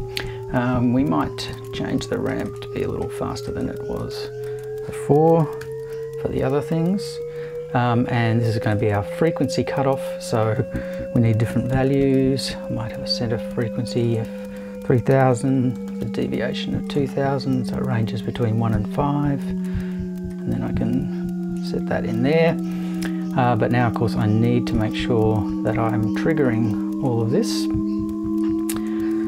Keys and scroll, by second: 5.3 BackSpace, 5.6 5, 11.3-12.2 typing, 15.1 2, 15.8 0.